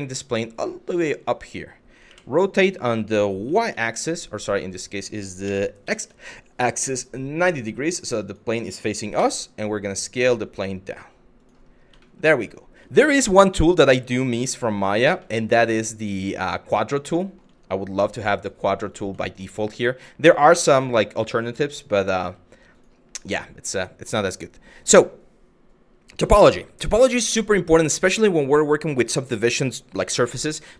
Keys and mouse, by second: 0.6 click, 1.7 r, 3.1 y, 5.1 r, 7.9 ctrl+click, 8.8 s, 11.0 click, 11.7 middle click, 14.1 g, 16.8 middle drag, 17.6 g, 18.5 click, 18.9 middle drag, 20.3 s, 21.0 click, 21.8 g, 22.3 click.